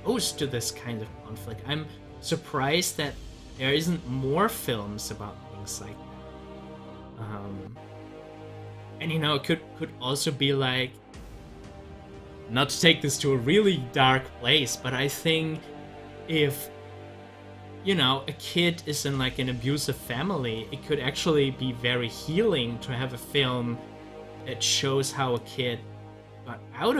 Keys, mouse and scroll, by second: 17.6 scroll up 1, 18.4 scroll down 1, 19.0 scroll up 1, 19.3-23.0 middle drag, 23.2 click, 26.4-26.9 drag.